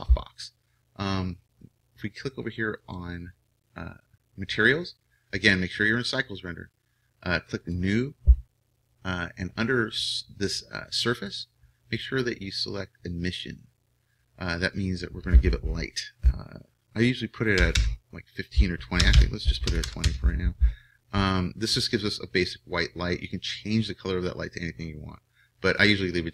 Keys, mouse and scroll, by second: 2.8-4.5 drag, 7.6-13.0 drag, 14.7-16.4 drag, 19.1 BackSpace, 23.2-25.2 drag.